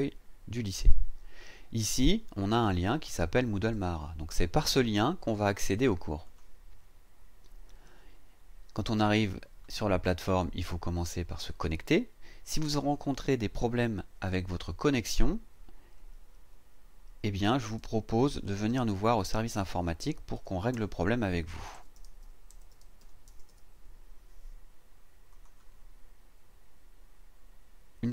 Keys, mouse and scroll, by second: 6.2 click, 12.8 click, 14.7 click, 15.9 e, 17.5-20.3 typing, 20.7 Tab, 21.7-23.5 typing, 22.2 KP_Divide, 23.0 KP_Divide, 25.3 click.